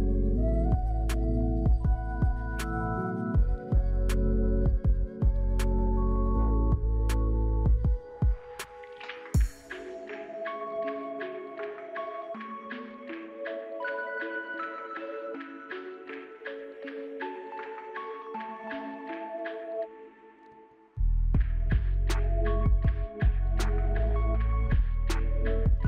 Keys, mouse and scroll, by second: 0.6 right click, 13.5 shift+click.